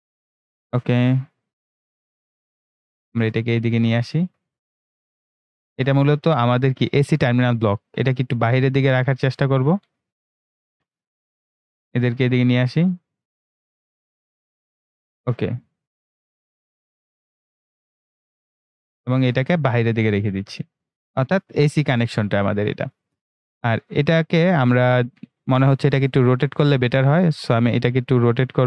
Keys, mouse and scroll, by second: 1.7-28.6 drag.